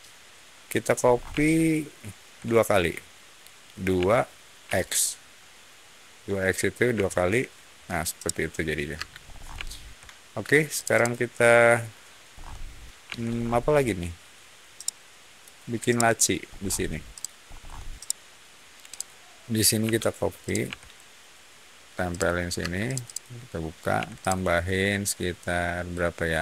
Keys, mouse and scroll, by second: 0.9 scroll down 1, 1.3 shift+middle click, 3.9 2, 4.6 x, 6.8 Return, 8.1 middle click, 8.8 space, 9.1 scroll up 1, 9.6 shift+middle click, 10.7 shift+click, 10.9 shift+click, 12.2-13.0 scroll up 1, 13.0 Escape, 13.2 scroll down 1, 14.7-15.3 middle drag, 15.8 middle click, 16.4 middle click, 17.0 click, 17.4 middle click, 17.9-18.3 middle drag, 18.8 click, 19.7 m, 20.4 click, 22.0 ctrl+click, 22.5 space, 22.8 click, 23.0 click, 23.9 p, 24.1 click.